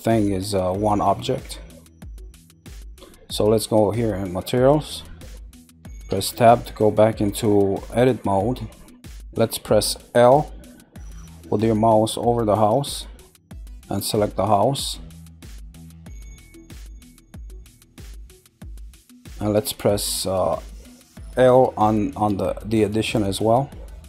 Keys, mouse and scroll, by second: 0.1-0.8 middle drag, 0.8 scroll down 1, 1.3-4.3 middle drag, 4.5 click, 6.0 Tab, 8.3-9.0 scroll down 1, 9.0-11.5 middle drag, 12.7 click, 13.9 middle click, 14.8 scroll, 16.1-17.3 middle drag, 18.7 shift+middle click, 23.7 middle click.